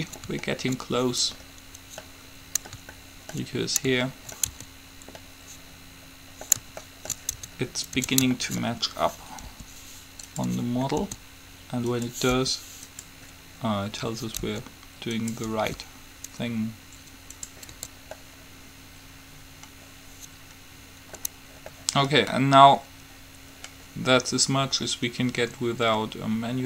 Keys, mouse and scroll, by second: 4.7 Tab, 7.5 Tab, 8.2 Tab, 9.6 r, 11.2 s, 12.7 r, 14.7 s, 15.7 r, 18.0 Tab, 21.9 middle click.